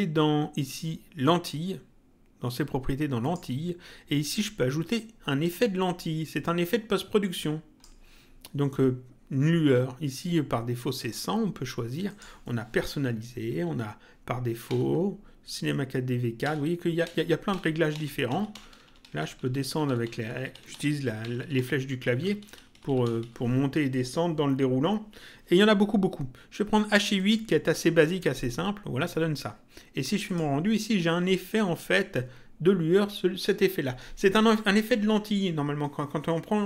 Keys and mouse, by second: 3.1 click, 7.1 click, 10.9 click, 12.0 click, 13.5 Down, 14.6 Down, 16.4 Down, 22.0 Up, 23.9 click, 27.1 click, 30.2 click.